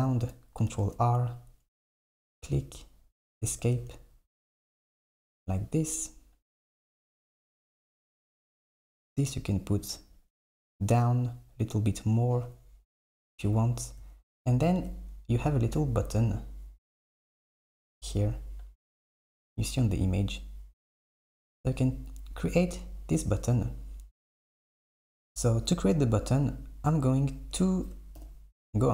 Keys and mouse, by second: 0.7 ctrl+r, 3.6 Tab, 8.7 Tab, 8.9 Tab, 16.1 click, 21.6 KP_7, 26.0 a, 27.0 click, 28.2 KP_7.